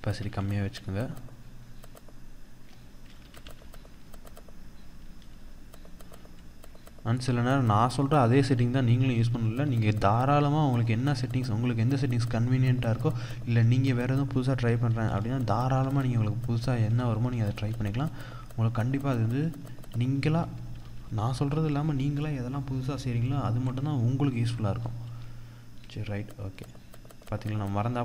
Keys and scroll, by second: 2.7 ctrl+z, 4.8 ctrl+-, 20.4 ctrl+-, 24.0 ctrl+-, 24.5 ctrl+0, 26.1 ctrl+0.